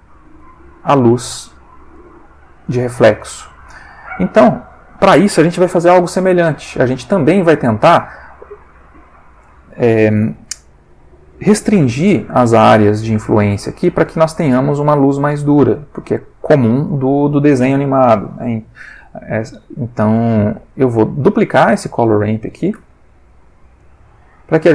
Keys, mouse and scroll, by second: 2.0 click, 3.0 click, 3.7 click, 16.9 click, 20.7 shift+a, 21.7 click, 22.7 shift+d, 23.8 click.